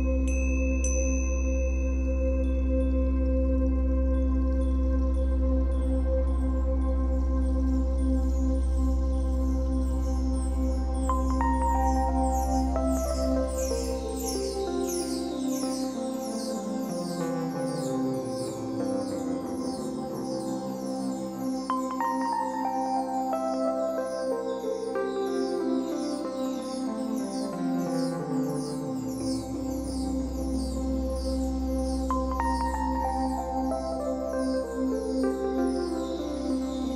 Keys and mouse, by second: 0.4 Delete, 1.6 ctrl+alt+click, 2.2 alt+shift+click, 3.3-7.7 drag, 8.5 click, 10.4 Left, 10.6 Left, 10.7 Left, 10.9-12.0 Left, 12.0 Right, 12.2 Right, 12.4 Right, 12.6 Right, 15.9 Escape, 16.9 ctrl+alt+click, 17.5 ctrl+alt+shift+click, 18.0 ctrl+alt+click, 18.9 ctrl+alt+shift+click, 19.4 ctrl+alt+click, 20.7 alt+shift+click, 21.2 ctrl+alt+click, 27.5 i, 29.3-30.5 drag, 31.1-32.2 drag, 34.3 typing.